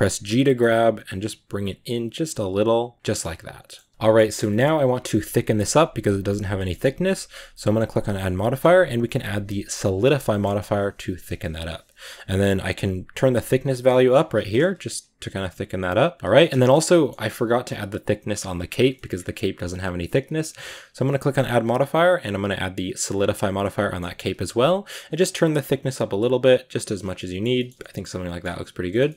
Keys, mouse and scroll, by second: 0.0 g, 3.1-4.2 middle drag, 4.2 scroll up 2, 4.3-7.6 middle drag, 9.8 click, 10.1 middle click, 10.3 scroll up 2, 13.4-16.2 drag, 16.2 scroll down 3, 16.3-18.6 shift+middle drag, 18.6 right click, 18.8-20.7 middle drag, 23.1 click, 23.5-24.8 middle drag, 24.8-26.9 shift+drag, 26.9 scroll down 3, 27.0-27.6 middle drag, 27.6 scroll down 1, 27.6-29.1 middle drag.